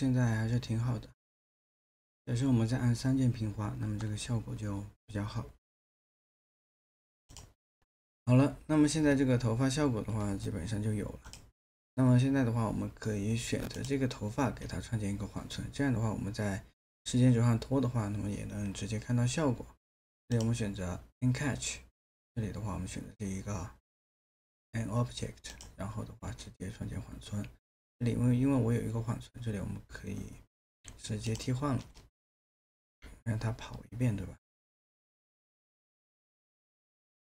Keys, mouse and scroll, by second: 7.8 alt+middle click.